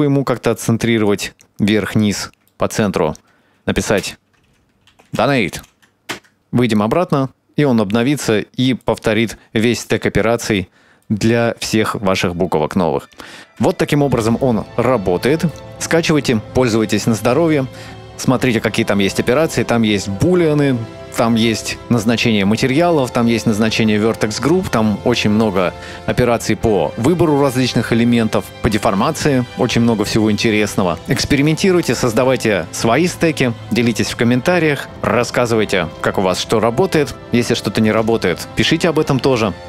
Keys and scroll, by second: 3.9 Return, 4.9-5.8 typing, 6.1 Tab, 10.7 Tab, 13.5 Tab, 20.3 KP_7.